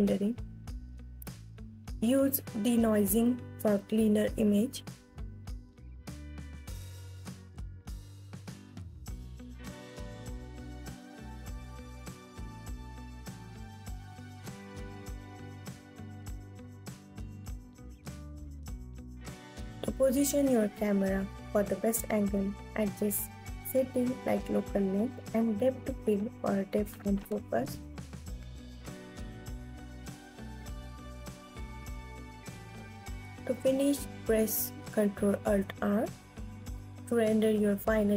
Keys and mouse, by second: 1.9-4.1 middle drag, 6.8-13.7 middle drag, 13.7-15.1 drag, 18.7 alt+click, 34.3 click.